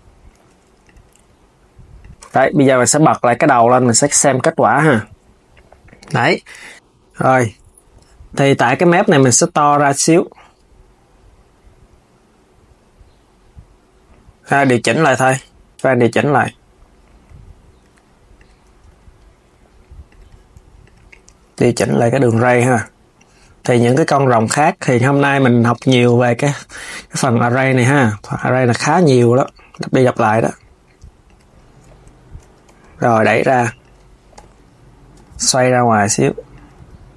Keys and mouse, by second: 0.1 z, 0.5 click, 1.0 alt+s, 1.7 alt+s, 2.0 Tab, 2.9 s, 3.4 click, 3.8 KP_3, 4.0 click, 8.3 click, 8.8 Tab, 18.1 click, 20.5 click, 21.3 g, 25.3 click, 28.5 click, 28.8 g, 32.4 KP_1, 33.1 g, 34.1 KP_7, 35.6 r, 36.5 KP_3.